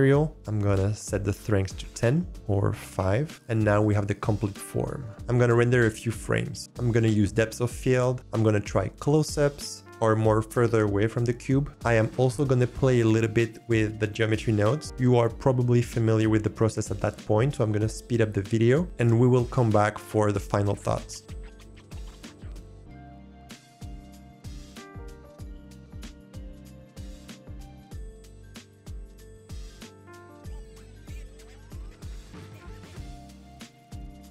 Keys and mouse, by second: 0.7-1.9 drag, 2.3 click, 21.8 click, 22.2 shift+click, 22.5 click, 23.4 alt+click, 23.6 shift+a, 24.0 alt+click, 24.2 g, 24.4 click, 24.6 click, 25.0 drag, 25.8 click, 26.3 click, 26.8 g, 27.1 click, 27.5 g, 27.8 click, 28.5 click, 28.8 click, 29.3 click, 29.8 shift+click, 29.9 shift+click, 30.0 click, 30.2 click, 30.4 click, 30.6 click, 31.2 click, 31.6 click, 32.4 click, 32.6 shift+click, 32.8 click, 32.9 shift+click, 33.1 click, 33.2 shift+click, 33.4 click, 33.7 drag, 34.2 click.